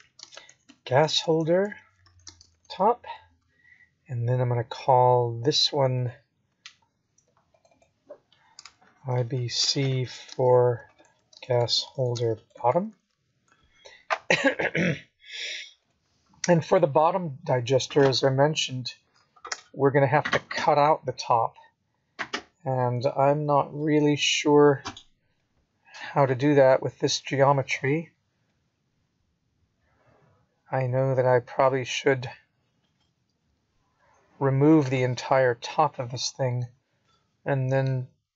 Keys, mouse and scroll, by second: 0.1-1.0 scroll up 7, 1.9 click, 3.4 click, 4.3 click, 6.8 click, 7.0 click, 24.6 click, 26.2 click, 26.4 click, 31.5 t, 34.5 click, 35.1 middle click.